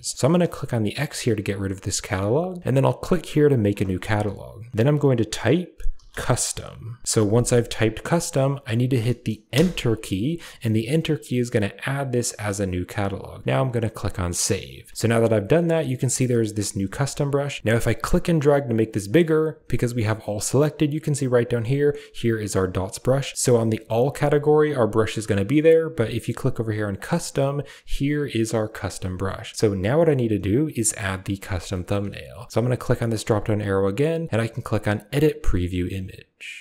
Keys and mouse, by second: 17.9-19.2 drag, 26.9 click, 31.7 shift+middle click, 33.1-36.6 drag.